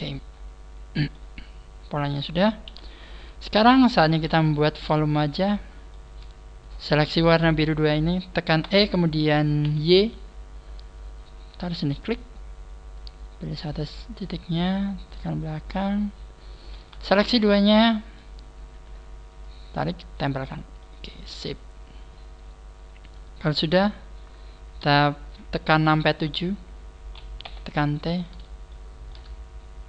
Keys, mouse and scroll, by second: 0.4-0.8 scroll down 4, 1.1 middle click, 2.6 KP_1, 3.5 right click, 4.0 shift+right click, 4.6-5.1 scroll down 3, 5.0 shift+middle click, 6.6-7.0 scroll up 4, 7.0 shift+right click, 7.0 KP_1, 7.8 scroll down 2, 8.6 e, 12.0 click, 12.3 scroll up 2, 12.9 right click, 13.4 click, 14.6 right click, 15.1 click, 17.1 shift+right click, 17.4 middle click, 18.4 scroll down 3, 19.4 click, 19.4 scroll down 1, 20.8 middle click, 24.8 KP_7, 27.4 t, 28.6 shift+middle click, 29.5-29.8 scroll up 4.